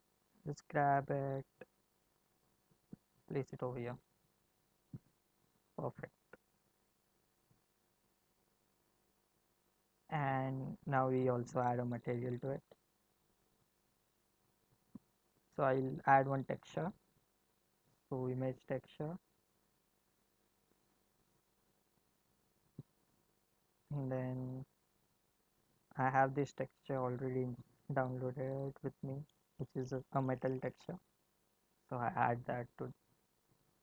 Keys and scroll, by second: 0.2 g.